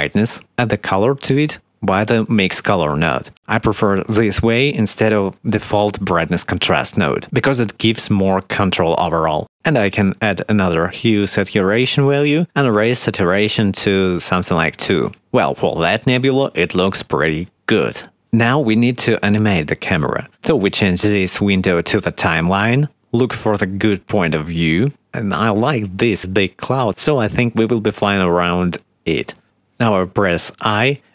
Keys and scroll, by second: 11.2 shift+a, 14.7 2, 23.9 shift+`, 24.9 shift+d, 25.4 a, 26.2 d, 26.5 a, 30.7 i.